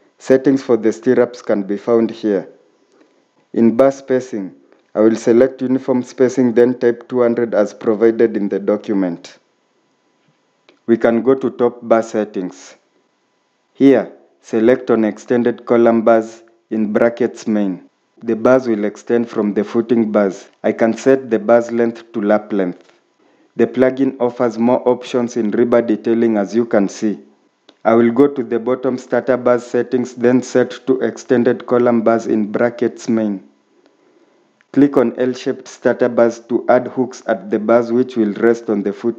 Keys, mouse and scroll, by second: 7.7-8.4 typing, 13.1 typing.